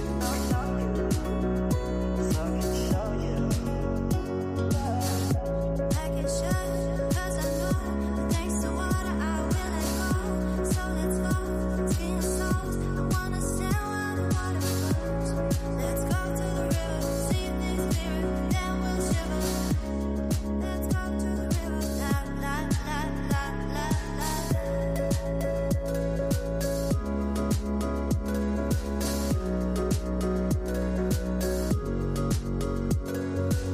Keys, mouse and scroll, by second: 1.1-1.5 scroll down 7, 1.5-3.1 middle drag, 3.1-6.2 drag, 9.1 scroll down 6, 9.3 middle click, 10.2-11.2 scroll up 16, 11.2-13.4 drag, 13.4-13.8 scroll down 6, 14.1 KP_0, 15.1 scroll down 3, 17.0 scroll up 1, 20.4-21.4 drag, 21.4-21.8 scroll down 7, 22.5 scroll up 2, 24.0 click, 25.9 click, 26.1-29.2 drag, 31.0 click, 31.5 ctrl+click, 32.9 ctrl+click, 33.5 click.